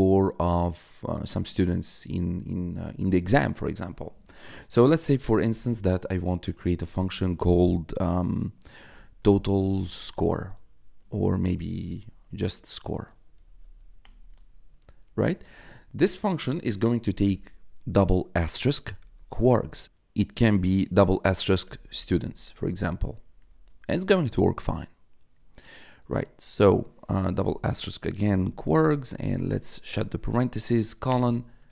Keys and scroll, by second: 5.0 d, 5.3 space, 8.6-10.9 typing, 12.9-15.4 typing, 17.0 *, 18.6-20.5 typing, 22.1 e, 22.4 t, 23.1 shift+0, 23.4 shift+;, 25.3 BackSpace, 27.1-30.2 typing, 31.0 Return, 31.5 Tab.